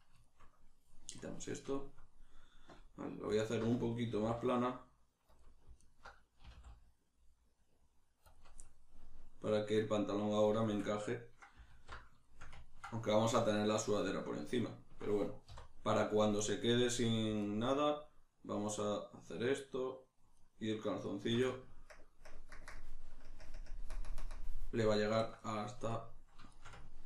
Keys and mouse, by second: 0.0 right click, 0.3 shift+middle click, 1.2 click, 1.7-3.4 shift+middle drag, 3.4 alt+right click, 4.1 s, 5.4 click, 5.8 alt+right click, 6.5 s, 8.4 click, 8.7-17.4 middle drag, 11.7 alt+q, 15.4 3, 17.4 alt+right click, 19.4 alt+shift+right click, 20.4 alt+shift+right click, 21.0 alt+shift+right click, 21.9 ctrl+KP_Add, 26.5-27.0 ctrl+shift+middle drag.